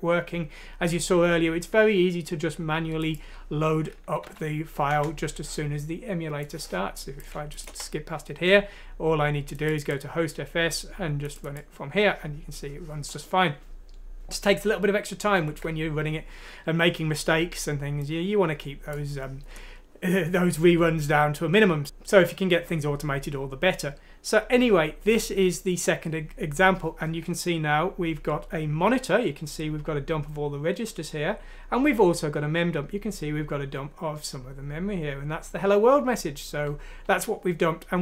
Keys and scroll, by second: 4.2 F6, 4.8 Return, 7.6 Return, 15.3 ctrl+End.